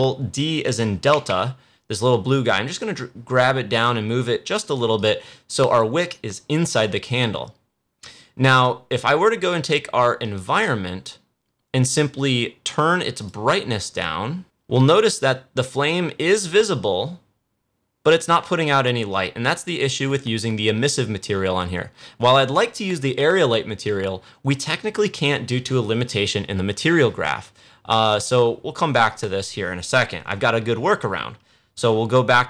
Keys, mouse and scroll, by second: 1.0 ctrl+d, 1.7-4.9 drag, 10.1 click, 13.1-22.2 drag, 29.0 click.